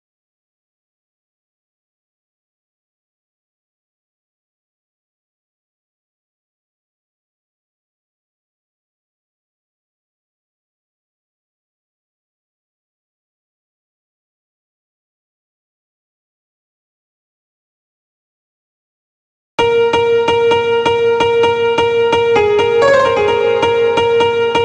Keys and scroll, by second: 15.5 ctrl+b.